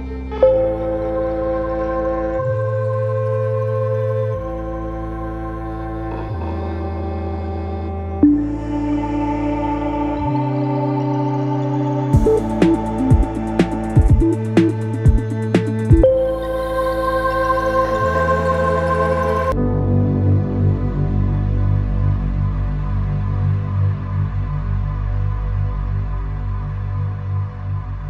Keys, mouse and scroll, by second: 0.4 click, 1.7 click, 3.7 g, 5.9 click, 6.6 shift+click, 7.6 ctrl+p, 11.4-14.6 drag, 19.7 click, 20.3 click, 21.4 g, 22.9 click, 23.2 g, 25.0 click, 25.3 g, 28.0 n.